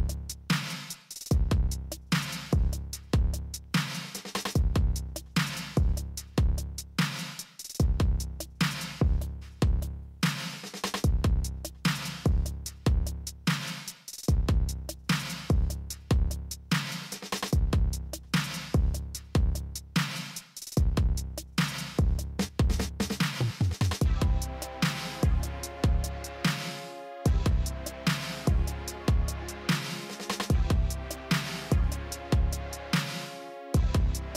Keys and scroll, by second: 31.0 alt+x.